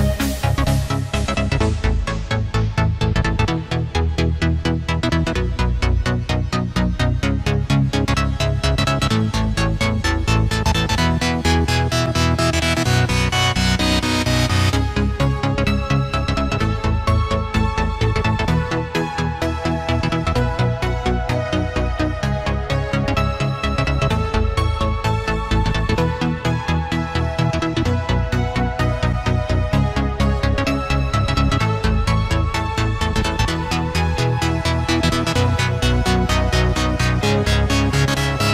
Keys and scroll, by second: 26.5 ctrl+z.